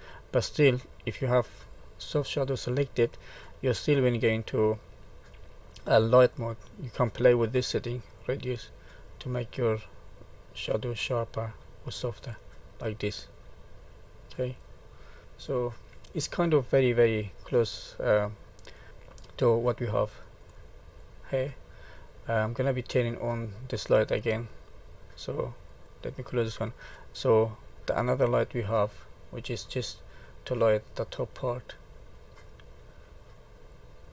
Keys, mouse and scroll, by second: 1.2 click, 2.1 middle click, 4.1 click, 8.1 click, 13.1 click, 15.2 middle click, 17.0 middle click, 17.7-18.6 scroll down 4, 18.6 middle click, 18.9 middle click, 19.2 middle click, 19.9 scroll up 3, 20.5 middle click, 25.6 click, 28.4 click, 31.7-32.4 scroll down 2, 32.4 middle click, 33.6 click.